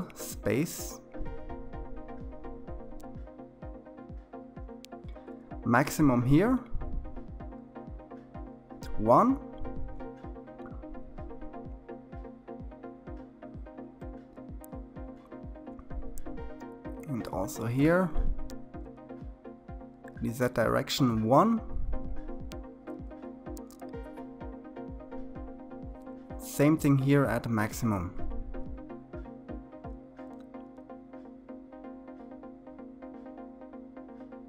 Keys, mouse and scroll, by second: 9.0-12.2 drag, 19.1-22.5 drag, 30.3-32.9 drag, 34.1-34.4 drag.